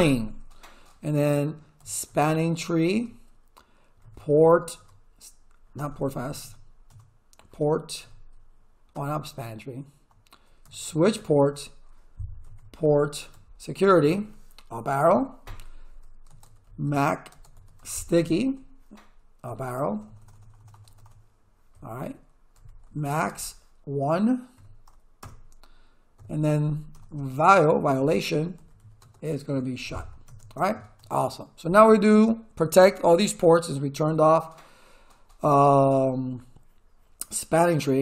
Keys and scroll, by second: 1.5-5.8 typing, 8.0 t, 8.9 BackSpace, 10.4-13.3 typing, 13.9 Return, 15.0 Up, 16.2-17.5 typing, 17.8 Tab, 18.2 Return, 19.5 Up, 19.8 BackSpace, 22.5 a, 22.8 x, 23.1 space, 24.5 1, 25.2 Return, 26.1 Up, 26.9 BackSpace, 28.3-30.5 typing.